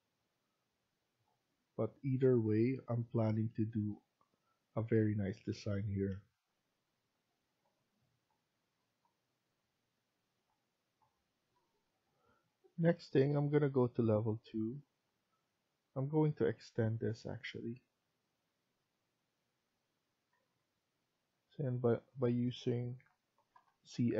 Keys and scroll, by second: 11.8 F1, 20.3 Escape, 20.5 Escape, 23.3 typing.